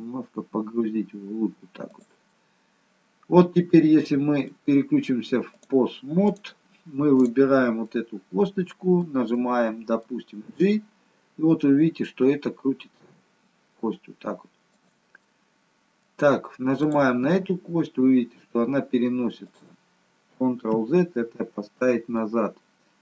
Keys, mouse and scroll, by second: 2.3 middle click, 6.7 click, 7.2 click, 7.9 middle click, 9.3 middle click, 10.4 g, 15.3 middle click, 16.8 click, 17.1 g, 20.6 ctrl+z, 22.1 middle click.